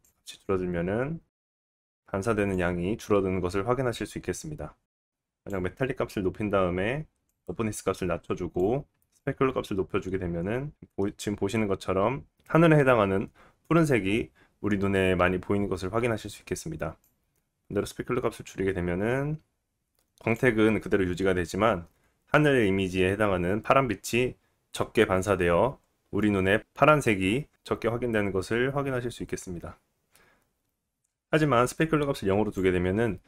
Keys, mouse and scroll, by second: 12.6-14.1 middle drag, 14.1-15.1 drag, 16.5-33.2 drag, 16.5 middle click.